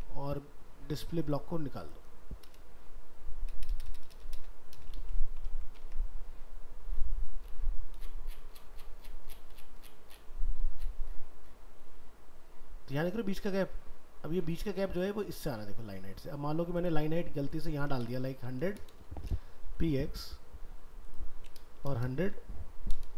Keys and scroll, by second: 5.0 ctrl+s, 5.8 alt+Tab, 14.4 alt+Tab.